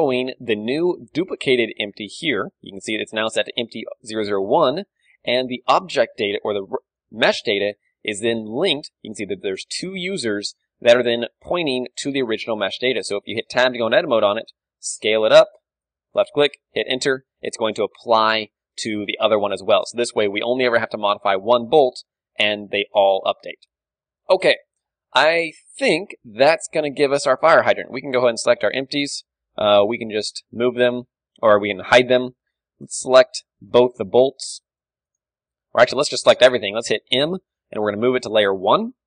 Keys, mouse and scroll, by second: 0.6-2.5 drag, 2.1-5.7 right drag, 5.7-8.7 drag, 11.3-13.9 drag, 13.9 Tab, 14.4 s, 16.1-17.9 drag, 16.8 Tab, 18.9 Tab, 19.4 ctrl+z, 20.0 ctrl+z, 20.7 Tab, 20.9 z, 21.0-27.5 middle drag, 21.4 a, 26.5 KP_1, 27.7-28.9 right drag, 28.9-30.6 middle drag, 30.6 m, 30.8-32.2 middle drag, 32.2 h, 33.0-37.2 right drag, 33.2 z, 37.2 m.